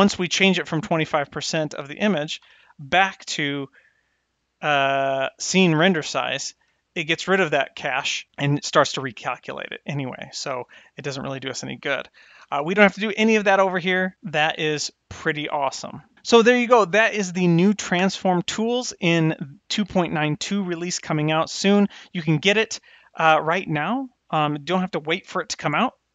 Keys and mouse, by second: 2.4 n, 3.7-5.6 drag, 6.7 n, 10.6 n, 14.1 n.